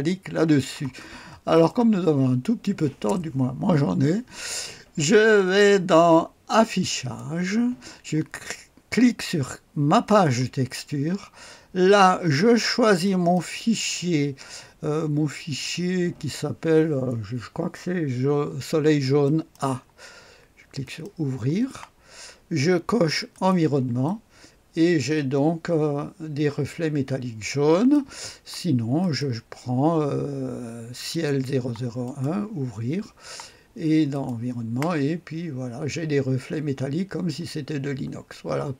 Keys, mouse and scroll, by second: 1.1-1.5 scroll down 1, 1.5 click, 6.9 click, 10.0 click, 13.0 click, 19.2 click, 20.8 click, 23.3-27.9 drag, 29.0 click, 31.1 click, 32.0 click, 34.1-38.7 drag.